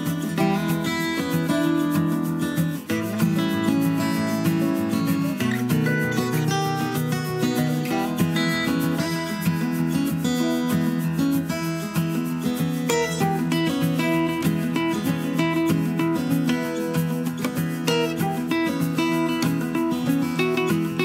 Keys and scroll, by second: 17.3 super+d.